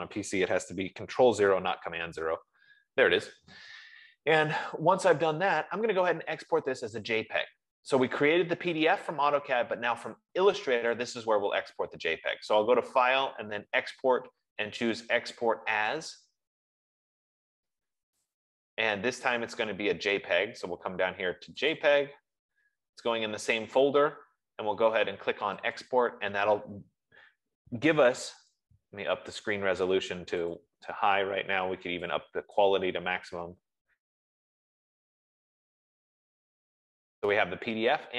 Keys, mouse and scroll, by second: 1.8 super+0, 11.9 click, 16.4 click, 18.7 click, 22.1 click, 26.2 click, 29.0 click, 31.0 click, 33.0 click.